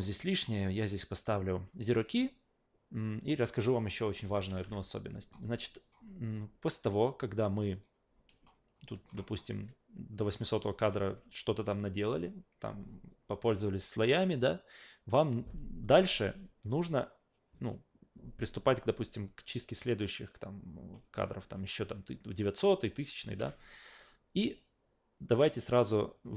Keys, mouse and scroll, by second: 4.5 alt+g, 5.8 click, 7.7 right click, 8.4-8.7 alt+middle drag, 8.9 alt+right drag, 9.2 alt+middle drag, 10.2 drag, 25.3 right click.